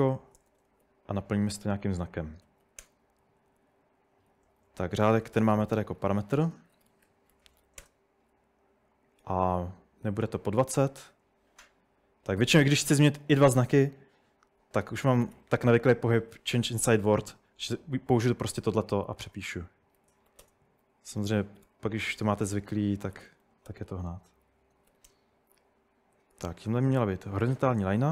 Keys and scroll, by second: 0.0-11.5 typing, 2.2 Escape, 14.8-15.8 typing, 18.4-26.7 typing.